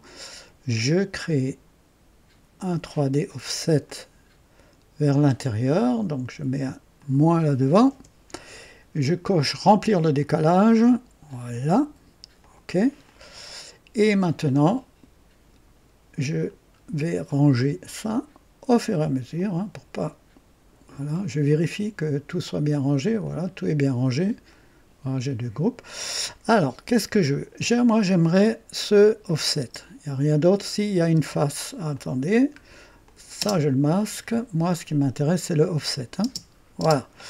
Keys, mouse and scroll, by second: 2.7 click, 3.8-5.4 drag, 6.9 click, 7.9 KP_Subtract, 9.4 click, 10.2-11.7 drag, 12.4 click, 13.0 click, 16.4 scroll down 1, 17.5-18.8 drag, 19.3-20.9 drag, 21.5 click, 23.2 click, 24.5 click, 25.7 scroll down 1, 26.8-27.6 drag, 29.2 click, 29.6 space, 31.3 space, 31.9 click, 32.3 scroll down 1, 33.0 click, 33.4 space, 34.0 click, 34.5 typing, 36.2-36.8 typing.